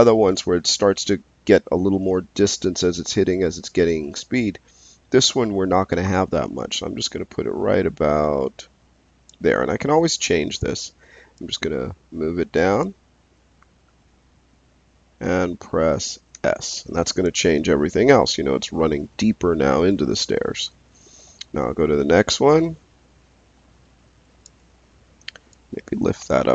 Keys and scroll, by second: 16.3 s.